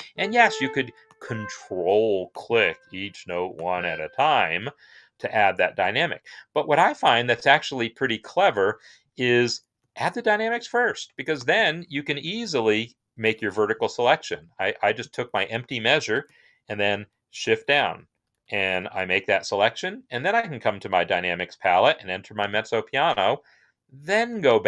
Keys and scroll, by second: 11.9 shift+Down, 12.0 shift+Down, 12.2 shift+Down, 12.4 shift+Down, 17.2 shift+Down, 17.7 shift+Down, 18.0 shift+Down, 18.2 shift+Down.